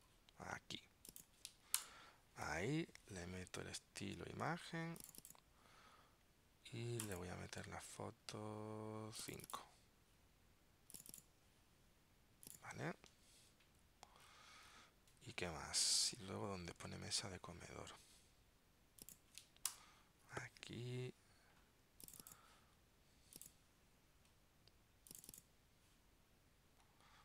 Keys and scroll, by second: 15.4 super+Tab, 16.9 super+Tab.